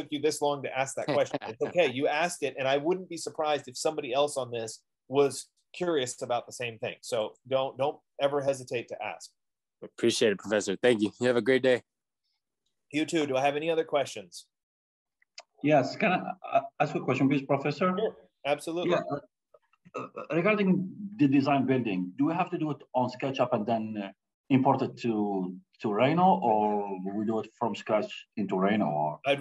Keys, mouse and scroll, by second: 1.3-2.6 typing, 1.7 middle click, 5.9 Delete.